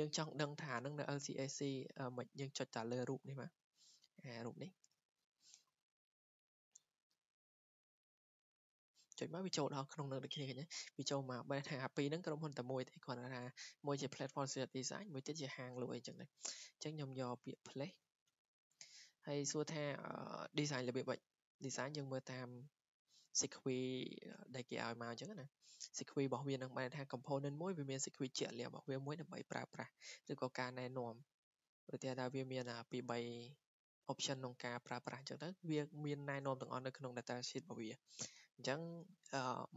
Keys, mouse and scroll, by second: 4.6-9.7 drag, 10.9-11.5 scroll down 3, 11.5-12.9 scroll up 2, 12.9 click, 13.2 scroll, 17.1 click, 18.0 click, 18.8 Escape, 19.3 scroll, 21.7 click, 22.2 click, 24.9 click, 25.3 click, 25.5 click, 25.6 click, 25.7 click.